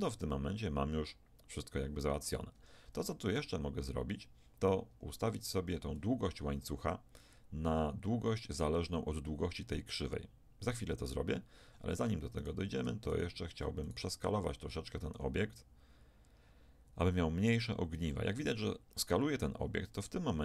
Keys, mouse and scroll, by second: 0.3 s, 3.4 Tab, 4.9 Tab, 5.4 Tab, 11.7 Tab, 12.4 click, 15.2 s.